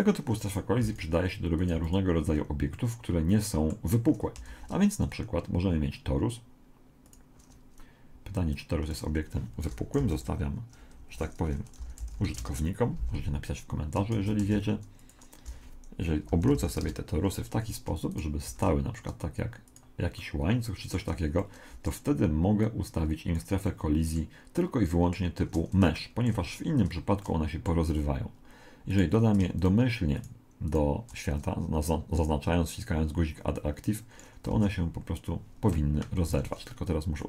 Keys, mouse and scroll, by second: 0.5-3.3 right drag, 0.8 x, 1.7 x, 2.7-4.5 middle drag, 4.5 shift+a, 8.6 click, 9.7 r, 11.8 r, 14.2 shift+d, 15.5 r, 18.1 right click, 18.5 shift+d, 20.2-23.1 middle drag, 22.6 click, 23.6-29.1 middle drag, 28.9-32.4 right drag, 32.8 click, 34.5 alt+a, 36.2 Escape.